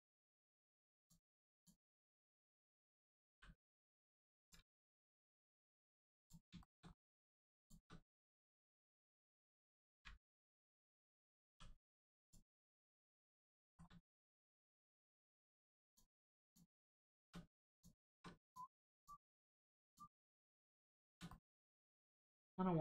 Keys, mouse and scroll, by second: 2.1 scroll down 1, 3.3 l, 4.3 click, 4.7 middle click, 6.1 click, 6.5 shift+middle click, 6.8 scroll up 1, 7.5 shift+click, 9.1 middle click, 9.1 middle click, 9.9 u, 10.3-10.9 scroll down 1, 11.5 g, 12.2 click, 13.0 middle click, 13.6 shift+middle click, 14.3 middle click, 14.8 middle click, 15.8 click, 16.4 shift+click, 17.7 click, 18.4 click, 18.9 shift+click, 19.8 shift+click, 21.3 middle click, 21.3 middle click.